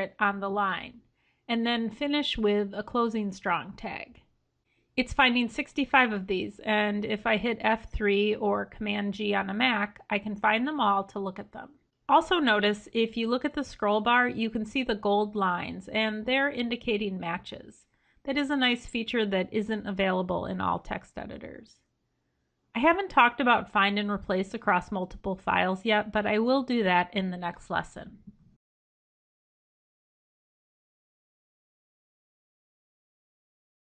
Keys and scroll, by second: 4.6 F3.